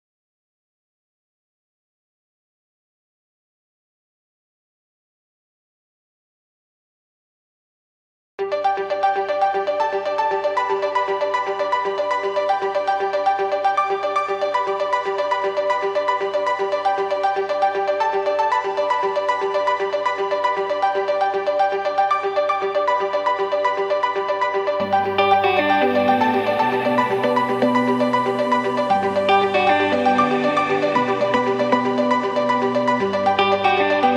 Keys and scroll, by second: 22.7 b, 25.8 Escape, 26.2 Escape, 29.3 b, 32.1 b, 33.3 b.